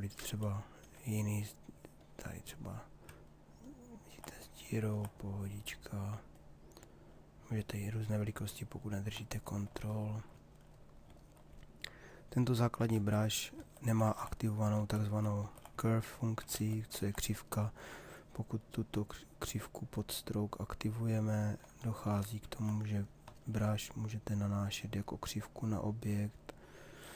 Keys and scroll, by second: 12.5 ctrl+z.